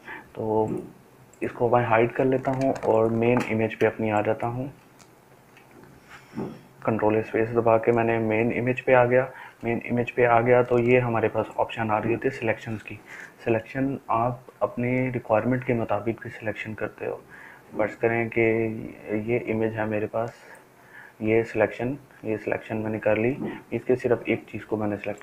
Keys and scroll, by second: 2.7 ctrl+space, 3.2 ctrl+space, 3.2 ctrl+space, 3.4 ctrl+space.